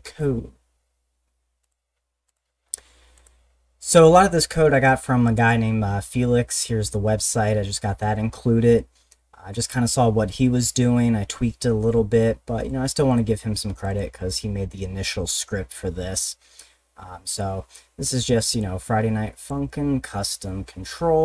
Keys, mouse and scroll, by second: 1.6 click, 2.3 click, 3.2 click, 5.3 click, 12.6 click, 13.1 click, 13.7 click, 13.9 click, 18.6 click.